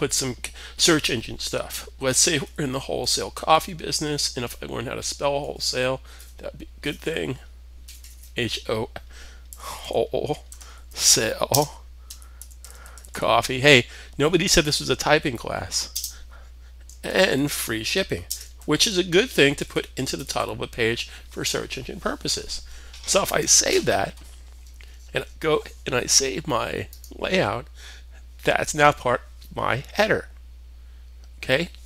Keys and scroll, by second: 1.1-13.1 typing, 14.6-15.4 typing, 16.5-20.4 typing, 22.0-22.7 typing.